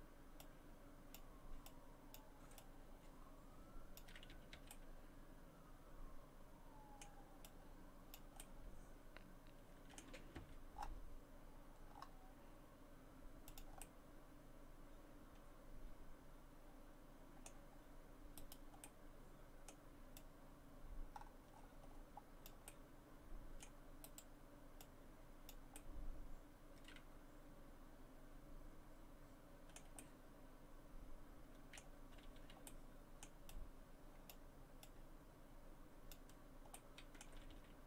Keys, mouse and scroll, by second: 1.7 click, 2.6 click, 4.3 a, 4.5 a, 4.7 middle click, 7.4 click, 8.4 middle click, 10.4 r, 13.8 middle click, 18.4 right click, 18.8 middle click, 20.2 click, 22.7 middle click, 24.0 right click, 24.8 click, 27.1 middle click, 30.0 middle click, 32.2 a, 32.4 a, 32.7 middle click, 33.5 click, 34.8 click, 36.7 middle click, 37.3 a, 37.5 a.